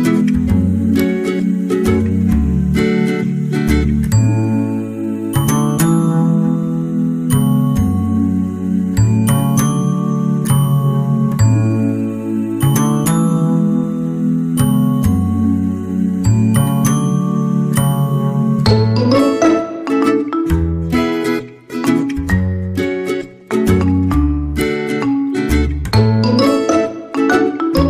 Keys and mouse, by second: 2.3 right click, 2.6 g, 3.4 middle drag, 3.9-5.4 middle drag, 5.6 shift+middle click, 6.2 middle click, 9.0 k, 16.6 right click, 16.9 g, 18.3 right click, 18.3 g, 19.2 right click, 19.4 g, 20.6 right click, 20.7 g, 21.7 right click, 21.8 g, 23.2 right click, 25.3 shift+right click, 26.0 shift+right click, 26.3 x.